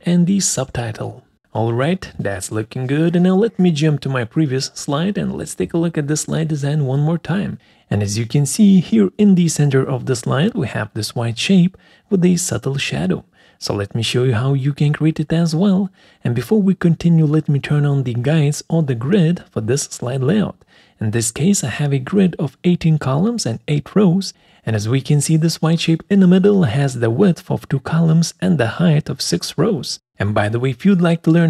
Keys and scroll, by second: 0.0-1.5 typing.